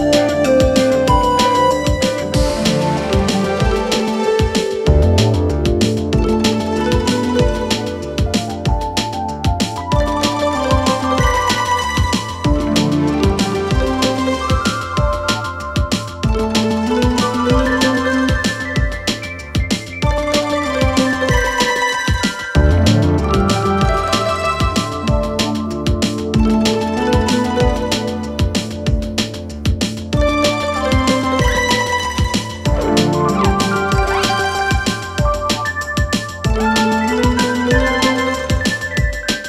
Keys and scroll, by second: 1.1 ctrl+z, 6.7 ctrl+z, 22.8 ctrl+z.